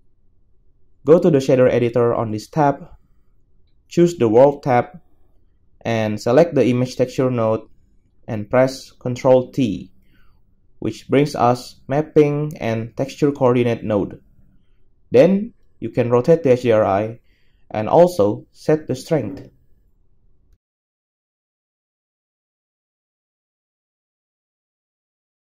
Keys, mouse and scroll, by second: 6.3 a, 9.8 ctrl+t, 16.5 KP_0.